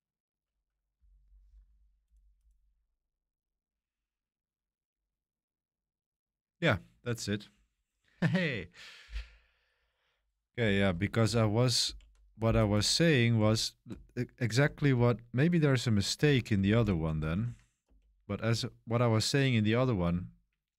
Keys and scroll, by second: 13.3-15.0 typing, 16.2 ctrl+c, 16.3-20.7 typing.